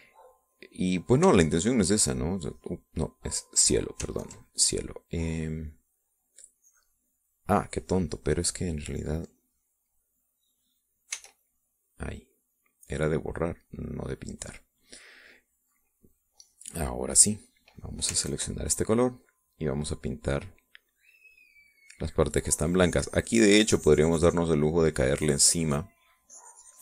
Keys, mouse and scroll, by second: 1.5 click, 2.5 ctrl+click, 4.2 click, 5.1 ctrl+click, 6.1-7.1 drag, 7.5 click, 9.9 click, 12.1 e, 12.3-15.3 drag, 16.0 click, 16.9 click, 18.4 click, 19.2 ctrl+click, 20.0-25.9 drag, 25.5 right click, 26.0-26.8 drag.